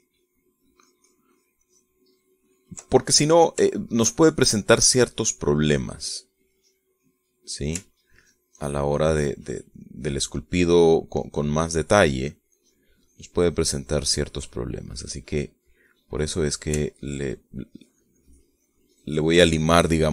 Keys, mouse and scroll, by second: 3.7 ctrl+middle click, 4.6-5.9 shift+middle drag, 6.1 middle click, 7.4 middle click, 8.1 middle click, 8.9 ctrl+click, 9.5 ctrl+click, 10.1 ctrl+click, 10.7 ctrl+click, 11.3 ctrl+click, 12.9 ctrl+click, 15.3 ctrl+middle click, 16.1 middle click, 16.9 middle click, 17.7-20.1 ctrl+drag.